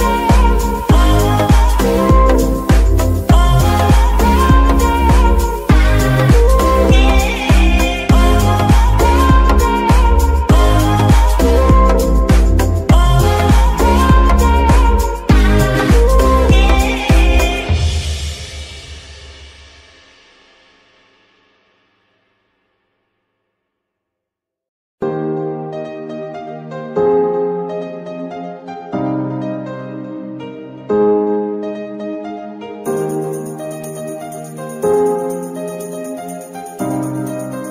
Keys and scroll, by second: 1.2 g, 1.5 Escape, 3.7 g, 4.0 Escape, 6.7 g, 6.9 Escape, 9.7 g, 10.2 Escape, 12.1 g, 12.3 Escape, 15.8 g, 16.2 Escape, 18.1 g, 18.3 Escape, 20.2 g, 20.4 Escape, 23.4 g, 23.8 Escape, 27.0 shift+g, 27.3 Escape, 30.9 g, 31.1 Escape, 34.4 g, 34.7 Escape, 36.4 g, 36.7 Escape.